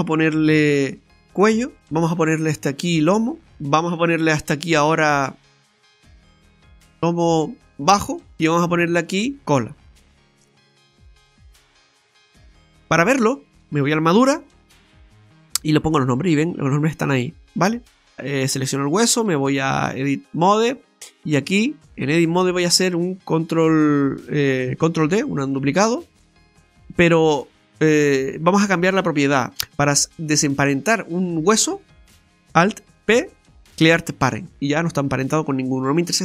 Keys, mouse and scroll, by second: 1.8 right click, 2.4-3.2 scroll down 1, 3.2 scroll down 1, 3.4 click, 4.3 right click, 6.4 click, 9.1 right click, 9.9 click, 11.3 BackSpace, 11.4 BackSpace, 13.8 click, 15.2 click, 15.8-16.3 scroll up 3, 16.3 middle click, 18.5 right click, 19.4 right click, 19.4 click, 20.7 click, 20.8 right click, 25.1 shift+d, 25.9 click, 26.8 scroll up 2, 27.0 shift+middle click, 33.0 alt+p.